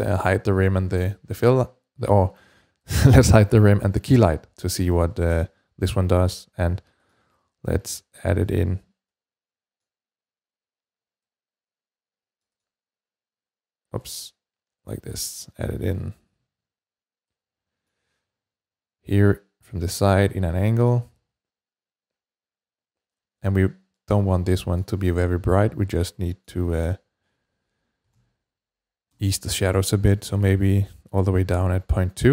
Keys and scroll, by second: 27.7-28.4 typing, 28.9 Return.